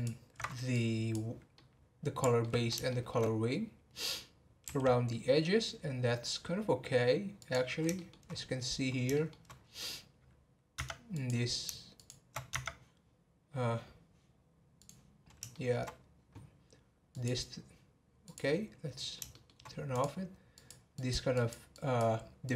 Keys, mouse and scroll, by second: 0.7 click, 1.5-3.5 middle drag, 3.5-4.1 scroll down 1, 4.1-4.6 scroll down 1, 4.6 r, 7.9 shift+middle click, 8.3-8.7 scroll up 10, 9.1 shift+middle click, 9.5 scroll up 2, 10.7 Tab, 11.1 click, 11.9 shift+click, 12.5 Tab, 14.7 click, 15.5 shift+middle click, 15.9-17.1 scroll down 2, 17.1-19.3 drag, 19.3-19.7 shift+middle drag, 19.7 scroll up 1, 19.9 click, 20.5 click, 20.9 click, 21.7 click, 22.4 click.